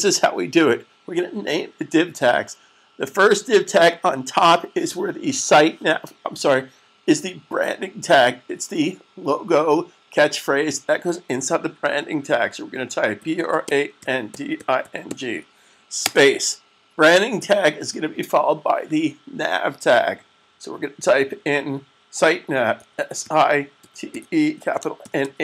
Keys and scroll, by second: 13.1-14.9 typing, 22.7-23.9 typing, 24.9-25.3 typing.